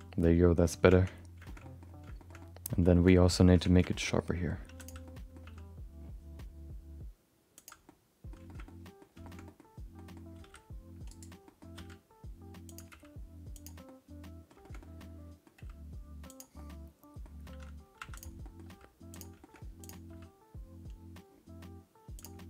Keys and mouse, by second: 1.1 Tab, 1.4 shift+middle click, 1.6 middle click, 2.2 shift+middle click, 2.4 middle click, 2.9 middle click, 3.1 middle click, 3.5 Tab, 3.8 middle click, 4.0 middle click, 4.6 3, 4.8 click, 5.0 middle click, 5.4 g, 7.8 middle click, 8.4 shift+middle click, 8.6 middle click, 9.2 shift+middle click, 9.4 middle click, 9.9 middle click, 10.4 s, 11.4 middle click, 11.7 r, 12.9 g, 13.8 middle click, 14.6 shift+middle click, 14.8 middle click, 15.5 g, 16.5 middle click, 18.0 2, 18.1 click, 18.4 middle click, 18.6 g, 19.4 shift+middle click, 19.8 click, 20.1 g.